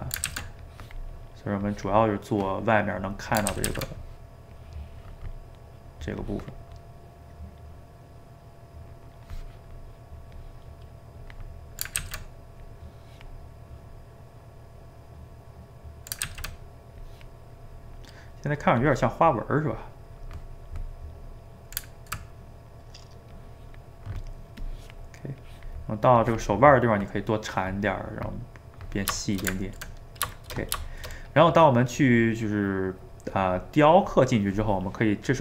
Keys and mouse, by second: 0.3 ctrl+z, 0.6-3.5 drag, 3.5 ctrl+z, 3.7 ctrl+z, 4.6 click, 5.5 middle click, 6.2 click, 6.9-9.9 middle drag, 10.3-12.0 drag, 12.0 ctrl+z, 12.6-14.5 drag, 14.5-16.3 middle drag, 16.3 ctrl+z, 17.0-21.0 drag, 21.0-23.3 middle drag, 23.3 click, 23.9 middle click, 24.6-27.3 drag, 27.3-35.3 middle drag.